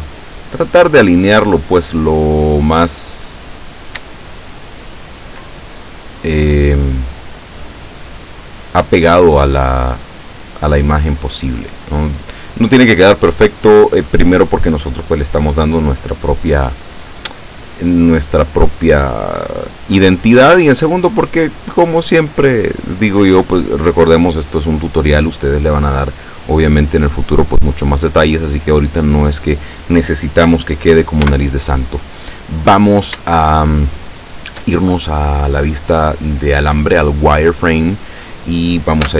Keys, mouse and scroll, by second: 4.2-5.4 shift+middle drag, 6.5-12.0 drag, 20.9 right click, 31.2 z, 32.6-33.0 scroll up 2, 33.3-34.8 shift+middle drag.